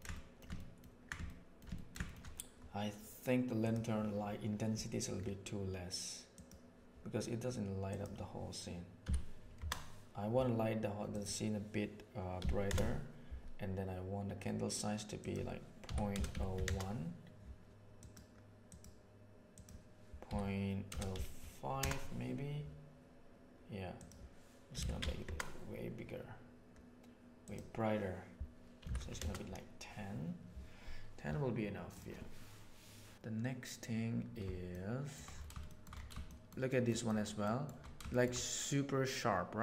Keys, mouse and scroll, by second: 0.1 shift+middle click, 0.5 ctrl+middle click, 1.2 shift+middle click, 1.7 ctrl+click, 7.8-13.4 drag, 15.2-18.7 drag, 19.6-22.7 drag, 23.9-26.8 drag, 27.4-30.4 drag, 34.7-35.1 shift+middle drag, 35.6 shift+middle click, 36.2 shift+middle drag, 36.7 shift+middle drag, 37.1 shift+middle drag, 37.4 shift+middle drag, 38.1 shift+middle drag.